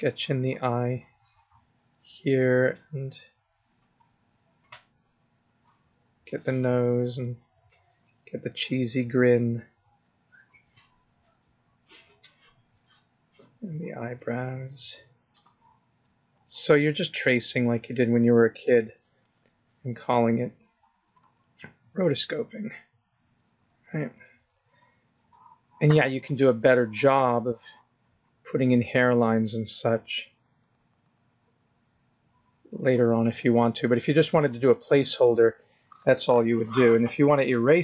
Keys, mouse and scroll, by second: 0.0 click, 1.4 click, 2.8 click, 4.0 click, 7.1 click, 7.8 click, 8.2 click, 8.6 click, 9.0 click, 11.2 click, 13.4 click, 14.3 click, 16.3 click, 19.3 click, 19.6 click, 20.0 click, 21.2 click, 21.5 click, 21.7 click, 22.9 click, 24.2 click, 24.6 click, 25.1 click, 29.7 click, 34.2 click.